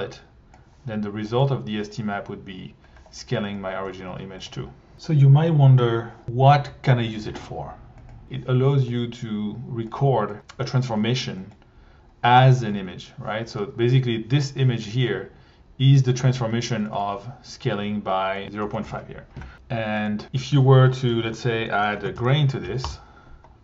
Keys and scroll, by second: 1.4 1, 4.1 1, 4.5 2, 11.0 1, 12.7 1, 18.6 BackSpace, 18.8 5, 18.9 Return, 19.5 1, 20.2 1, 21.3 Tab, 21.6-22.7 typing, 22.8 Return.